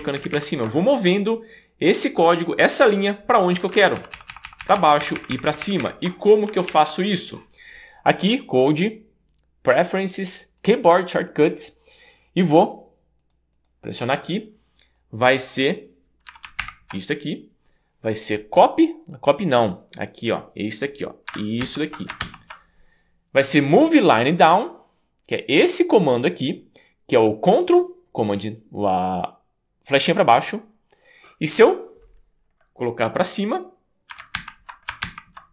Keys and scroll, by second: 4.0 ctrl+super+Down, 4.5 ctrl+super+Down, 5.0 ctrl+super+Up, 6.7 super+s, 16.6 alt+super+Up, 21.6 ctrl+super+Down, 22.2 ctrl+super+Down, 34.4 ctrl+super+Up, 35.0 ctrl+super+Up.